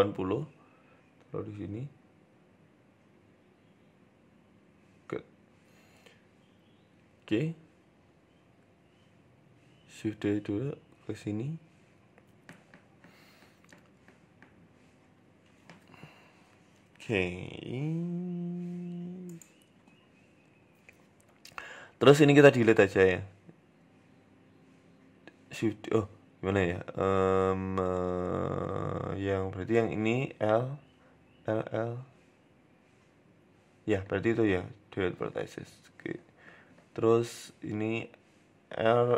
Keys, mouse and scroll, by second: 1.9-2.6 scroll up 6, 2.1 shift+middle click, 3.2 g, 4.6-5.8 scroll down 6, 4.7 Tab, 5.0 shift+middle click, 5.8 s, 9.4 shift+d, 11.4 shift+middle click, 12.2 Tab, 12.6 a, 12.9 g, 14.3 Tab, 14.4 s, 15.4 g, 16.5 shift+middle click, 17.1 right click, 17.3 Tab, 18.8 l, 19.6 l, 23.2 Tab, 24.6 shift+d, 26.2 Delete, 26.6-26.9 scroll up 2, 26.8 Tab, 27.2 shift+middle click, 27.4 right click, 27.6 Tab, 29.2-31.5 typing, 34.0 Delete, 35.7 l.